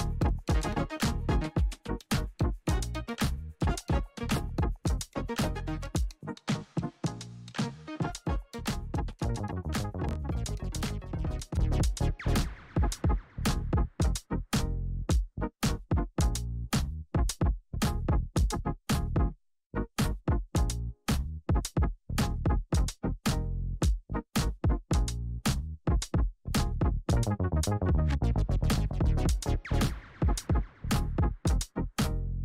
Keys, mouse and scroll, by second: 2.9 ctrl+alt+Home, 5.0 click, 8.1-9.4 scroll down 1, 9.4 click, 10.1-10.6 scroll down 1, 10.6 scroll up 1, 11.9 click, 14.8 ctrl+a, 16.2 click, 17.6 p, 18.4 click, 22.9 click, 24.1 right click, 25.1 click, 30.5 c.